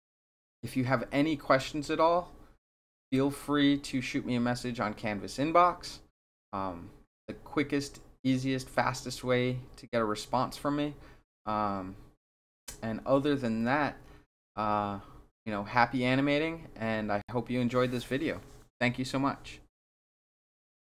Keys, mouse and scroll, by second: 20.7 click.